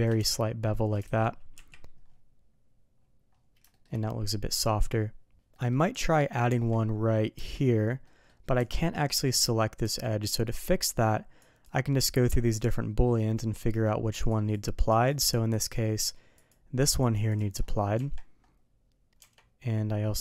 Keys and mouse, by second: 0.1 Tab, 0.7 middle click, 1.0 alt+a, 1.5 KP_3, 3.7 shift+middle drag, 5.5 middle click, 5.9 click, 6.4 Tab, 7.3 Tab, 8.0 middle drag, 8.8 middle drag, 9.8 Tab, 11.4 click, 13.0 middle click, 14.3 click, 14.9 click, 15.5 click, 16.3 click, 17.0 click, 17.9 Tab, 19.1 Tab.